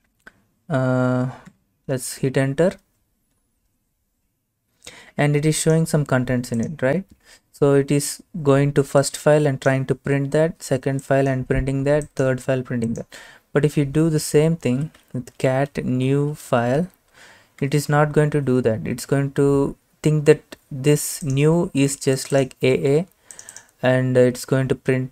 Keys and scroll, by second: 1.6 Return, 14.5-17.3 typing, 17.7 Return.